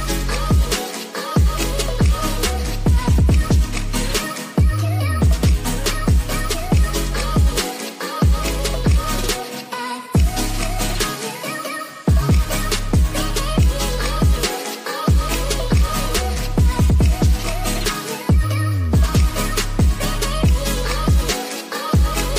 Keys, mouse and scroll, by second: 0.2 middle click, 2.4 click, 4.2 click, 6.1 middle click, 8.5-9.5 drag, 11.6-12.9 drag, 14.2-16.1 drag, 17.1 ctrl+s, 18.3 click, 18.9 shift+a.